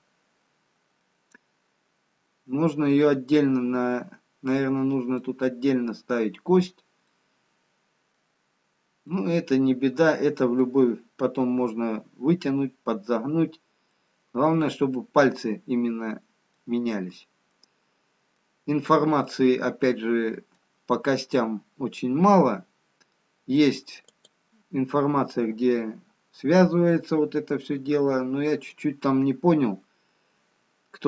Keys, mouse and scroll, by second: 1.6 scroll up 1, 2.5 scroll down 1, 5.1 middle click, 8.8 middle click, 8.8 scroll down 1, 10.1 middle click, 10.1 scroll down 3, 11.1 middle click, 13.6 scroll up 2, 14.4 middle click, 17.6 scroll up 3, 18.7 scroll down 3, 22.8 middle click, 25.0 click.